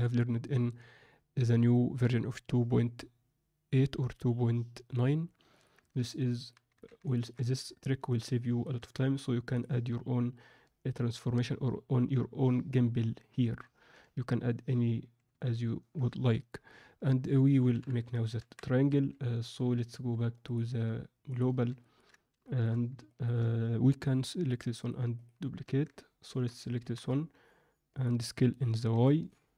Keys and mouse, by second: 6.0-6.5 middle drag, 6.7 z, 7.1 ctrl+middle drag, 7.5-8.6 middle drag, 9.5-15.7 drag, 17.7 KP_1, 18.3 Tab, 20.4-21.5 drag, 21.7 ctrl+alt+middle click, 22.4 shift+middle click, 23.0 ctrl+middle click, 24.7 click, 25.6 Tab, 26.8 shift+d, 29.0-29.5 middle drag.